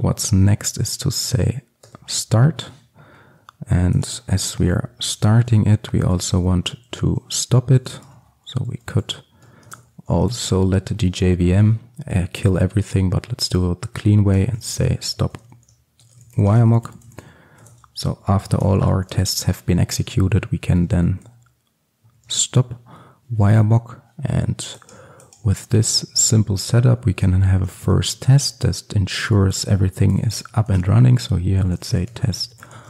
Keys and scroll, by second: 0.7 Return, 8.0 Return, 29.3 Return.